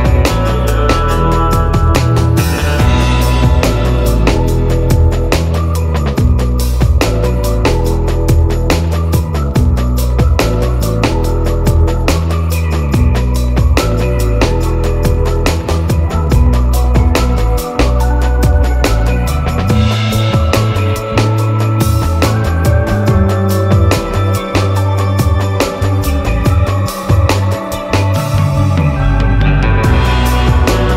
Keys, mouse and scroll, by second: 13.4 click, 15.4 middle click, 17.6 click, 17.7 middle click, 17.8-22.6 drag, 22.6 ctrl+z, 24.2-30.9 drag.